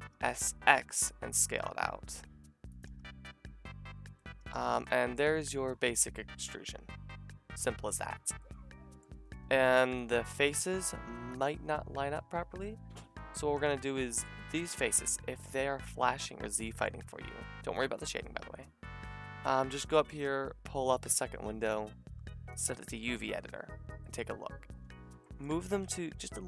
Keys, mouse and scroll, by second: 0.1 s, 5.2 a, 11.3 alt+shift+click, 11.4-15.4 alt+shift+middle drag, 15.4-17.9 drag, 16.4-17.7 middle drag, 17.9-20.3 middle drag, 20.3-26.4 drag, 25.6 g.